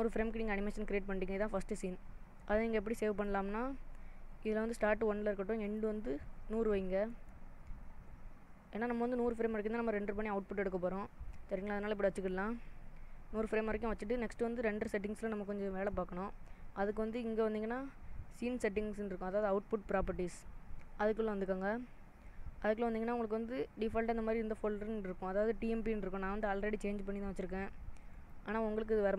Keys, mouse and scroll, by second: 5.7 click, 7.3 0, 9.3 click, 20.0 click, 21.9-23.3 scroll down 3, 28.1 click.